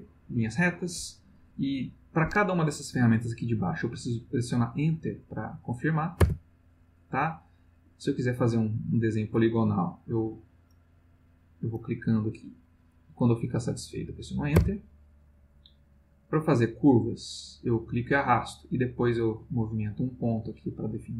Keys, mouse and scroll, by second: 6.2 Return, 7.9 click, 8.6 click, 9.3 click, 10.7 click, 11.2 click, 11.7 click, 12.1-14.0 drag, 14.5 Return, 15.9 click, 16.6-18.3 drag, 19.3-21.1 drag.